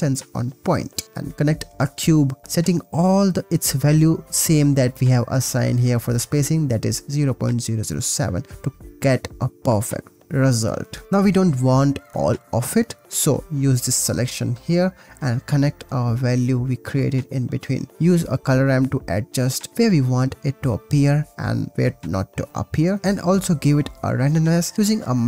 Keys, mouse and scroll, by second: 1.9 click, 2.6-5.5 drag, 9.4-12.0 middle drag, 15.4-17.7 middle drag, 17.9 middle click, 19.3 middle drag, 19.8 middle click, 19.9 middle click, 20.4 middle click, 20.6 middle click, 21.4 middle click, 22.5-24.2 middle drag, 23.0 shift+a, 24.2 middle click.